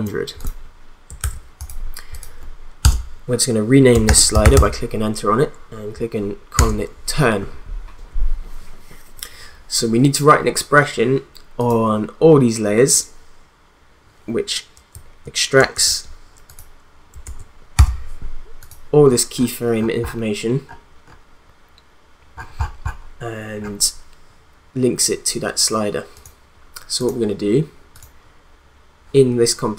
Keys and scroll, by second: 1.2 ctrl+z, 2.8 Return, 3.8-5.0 typing, 6.5 Return, 17.2 ctrl+a, 17.7 u.